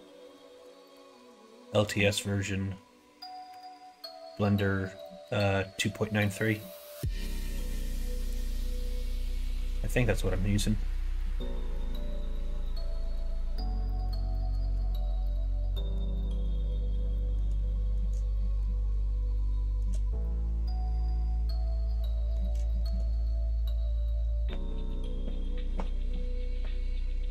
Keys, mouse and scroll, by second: 0.2 2, 0.8 alt+click, 5.0 middle click, 6.2 middle click, 7.6 click, 8.5 middle click, 9.2 scroll up 1, 9.2 middle click, 9.4 scroll down 1, 9.9 middle click, 10.5 scroll up 1, 10.5 shift+middle click, 11.1 middle click, 11.9 middle click, 12.6 scroll up 1, 12.6 middle click, 13.8 middle click, 14.2 shift+middle click, 15.2 middle click, 16.1 shift+middle click, 17.1 shift+middle click, 17.6 middle click, 18.3 shift+middle click, 19.3 shift+middle click, 20.1-22.3 middle drag, 22.6 shift+middle click.